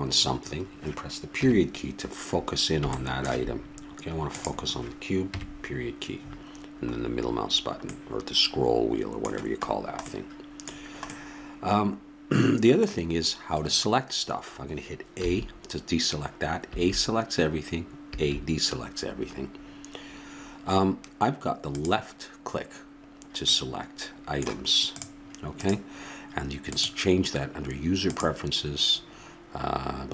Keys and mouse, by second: 1.4 KP_Decimal, 4.3-5.8 drag, 5.3 KP_Decimal, 15.2 a, 16.6 a, 21.7-23.5 drag, 23.5-24.9 middle drag, 24.9-28.5 drag.